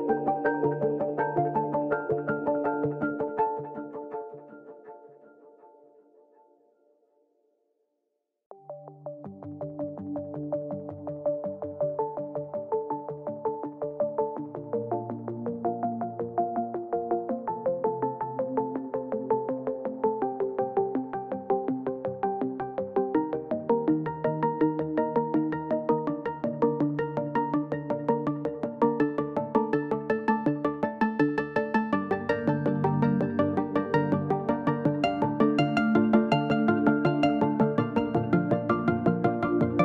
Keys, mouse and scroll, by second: 0.6-3.6 shift+drag, 3.6 ctrl+space, 3.7 ctrl+click, 4.1 ctrl+space, 4.1 click, 6.0 Down, 8.7 Up, 10.5 click, 11.0 ctrl+space, 11.1 ctrl+click, 11.5 ctrl+space, 12.8 Right, 14.3 space, 14.7 ctrl+click, 15.3 ctrl+click, 15.9 ctrl+click, 19.6 ctrl+t, 20.6-23.5 shift+drag, 23.5 ctrl+a, 24.3 click, 24.6 ctrl+a, 25.5 click, 26.5 ctrl+d, 27.1 ctrl+t, 27.8 shift+click, 28.9-37.3 drag, 38.0-39.8 drag.